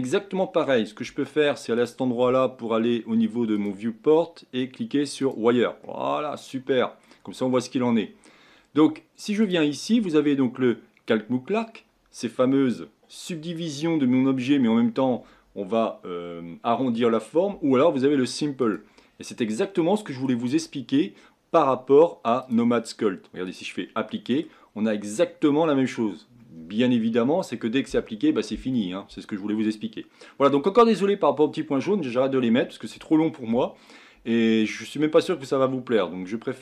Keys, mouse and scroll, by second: 1.7 click, 3.5-5.3 drag, 5.8-7.3 middle drag, 7.3-7.9 scroll up 2, 7.9 scroll down 1, 9.4 click, 18.6 click, 19.6-22.4 middle drag, 22.4-24.1 drag, 24.1-24.7 middle drag, 24.7-25.2 scroll up 5, 26.1-26.4 scroll down 2.